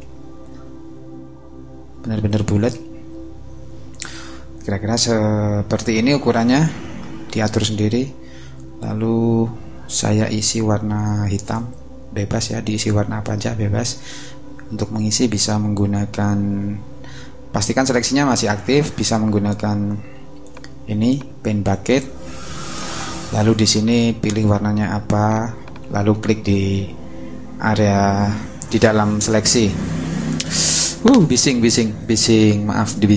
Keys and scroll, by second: 1.9 shift+space, 11.4 alt+Delete.